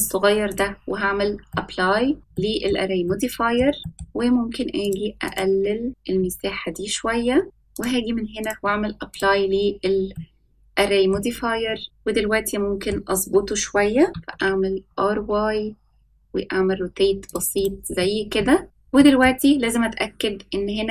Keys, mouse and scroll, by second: 1.5-2.2 middle drag, 2.3-2.6 shift+middle drag, 3.0 middle click, 3.8 ctrl+z, 3.8 middle click, 4.8 click, 7.4 middle click, 7.7-8.4 drag, 9.1 click, 10.1-11.1 middle drag, 11.2-11.6 scroll up 2, 11.8-12.8 middle drag, 11.8 click, 11.8-12.8 scroll up 1, 14.1 r, 17.5 click, 17.9-18.6 middle drag, 18.6 click, 18.6 scroll down 4, 18.9 middle click, 19.4-20.9 scroll up 2.